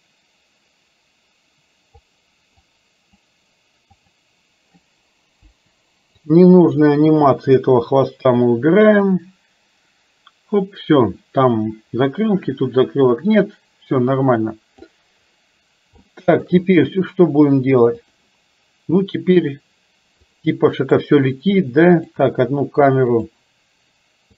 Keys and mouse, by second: 2.7 click, 4.0 click, 5.5 Delete, 6.3 click, 7.4 Delete, 9.1-15.0 drag, 16.1 shift+middle click, 20.5 click, 23.2 click.